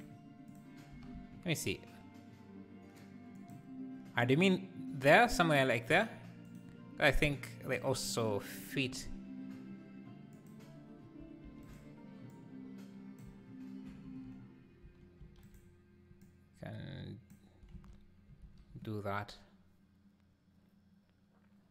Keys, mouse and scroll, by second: 0.5 click, 0.9 g, 7.7-10.5 drag, 11.6 shift+d, 12.3 click, 13.9 shift+r, 15.2 shift+d, 16.2 click, 17.7 alt+a.